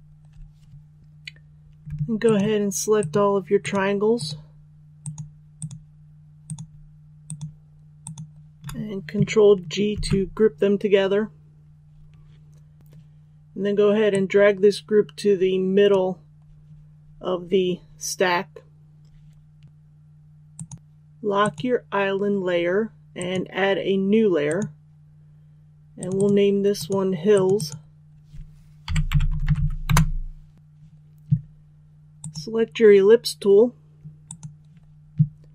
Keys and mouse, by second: 2.2 shift+click, 2.9 shift+click, 3.5 shift+click, 4.0 shift+click, 4.9 shift+click, 5.5 shift+click, 6.4 shift+click, 7.1 shift+click, 7.9 shift+click, 9.8 ctrl+g, 12.8-28.5 drag, 28.8-29.5 typing, 29.8 Return, 30.5 click.